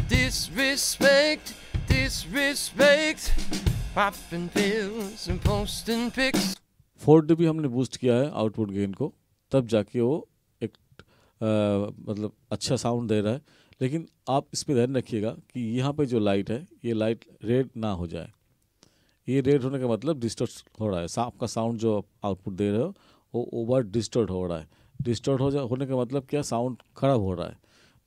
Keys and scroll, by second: 6.5 space.